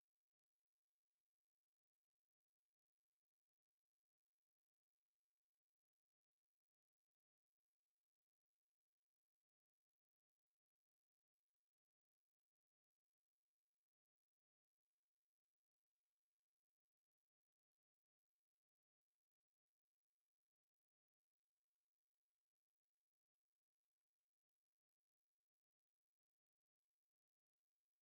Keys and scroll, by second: 3.3 Escape, 3.6 e, 3.7 space, 5.1 o, 5.3 o, 5.4 space, 6.1 Escape, 8.8 Escape, 10.1 s, 10.2 space, 10.6 F8, 12.6 Escape, 13.1 space, 14.3 m, 14.6 a, 14.6 space, 15.2 Escape, 15.7-16.7 typing, 18.0 Escape, 18.4 m, 18.5 space, 18.9 s, 19.0 space, 20.2 Escape, 21.2 space, 22.1 F8, 23.4 Escape.